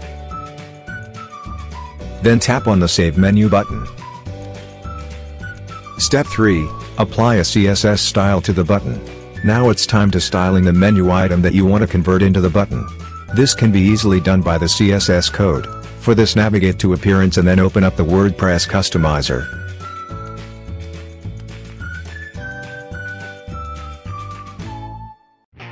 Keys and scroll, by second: 0.0-1.4 typing.